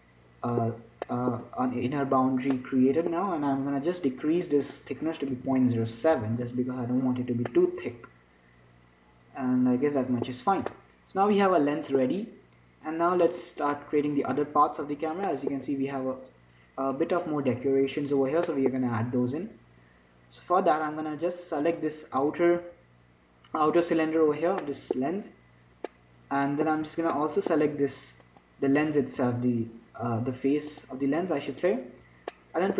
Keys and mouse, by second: 4.7-6.7 drag, 5.8 BackSpace, 7.8-9.6 middle drag, 10.7 middle click, 11.7-13.6 middle drag, 13.6 click, 14.7-15.9 drag, 15.0 z, 15.9-18.2 middle drag, 18.8-21.9 middle drag, 21.9-24.0 right drag, 22.8 z, 24.0 z, 27.0 z, 27.5-31.0 middle drag, 29.3 z, 31.9-32.7 drag.